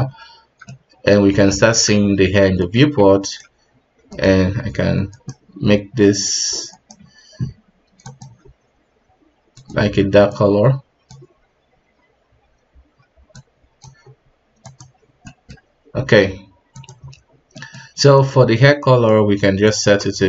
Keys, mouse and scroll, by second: 0.6-1.2 middle drag, 1.2 scroll up 2, 1.5 middle click, 1.9-3.4 scroll down 3, 3.4 ctrl+right click, 3.7-4.7 scroll up 2, 5.1 right click, 6.7 right click, 8.2 click, 10.3 click, 13.5-14.8 drag, 15.2-16.8 middle drag, 16.8 click.